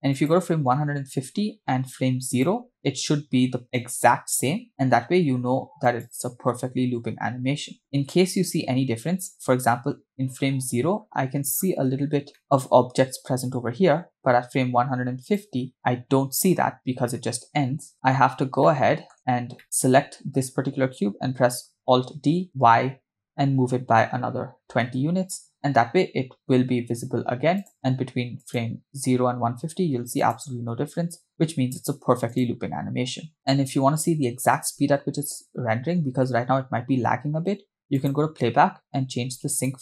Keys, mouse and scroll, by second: 0.3 click, 2.3 click, 4.0 click, 6.1 click, 7.9 click, 11.0-11.7 scroll up 4, 12.4 shift+middle click, 15.4 click, 17.9 KP_0, 18.2 scroll down 1, 18.6-19.1 middle drag, 19.3 scroll down 1, 19.6 middle click, 19.6 click, 22.5 alt+d, 25.5 KP_0, 27.8 click, 28.6 click, 30.3 click, 32.4 click, 33.0-33.5 scroll down 6, 33.3 space, 34.7 space, 38.0-39.8 drag.